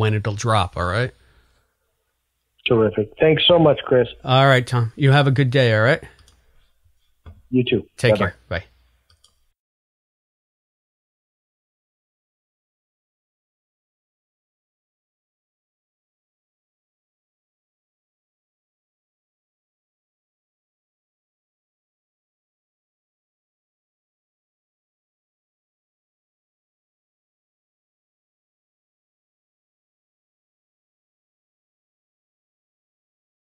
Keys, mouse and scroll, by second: 8.6 click, 8.9 space, 9.3 click, 9.7 click, 10.4 Delete, 11.0 click, 11.4 Delete, 11.9 click, 12.5 space, 13.3 ctrl+s, 14.4 ], 16.1 ctrl+s, 20.5 ctrl+a, 21.2 ctrl+g, 21.8 click, 23.2 right click, 23.7 click, 25.3 click, 27.2 click, 30.9-33.5 typing.